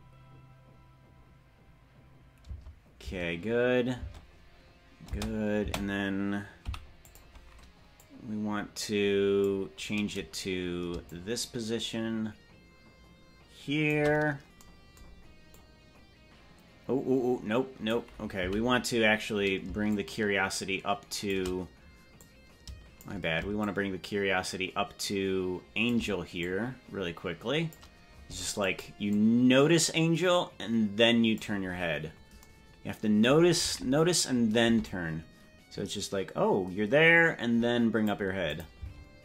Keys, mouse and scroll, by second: 2.5 space, 3.1 space, 4.1 space, 5.1 space, 5.7 space, 6.7 i, 8.0-9.5 drag, 11.0-13.9 shift+drag, 15.6-18.0 drag, 18.5 Right, 19.8-21.3 shift+drag, 22.1 click, 23.6-25.9 shift+drag, 26.3-27.7 drag, 28.7 click, 29.2-31.6 drag, 31.9-32.3 scroll down 4, 33.5 KP_0, 34.9-38.1 drag, 38.5 click, 38.7 space.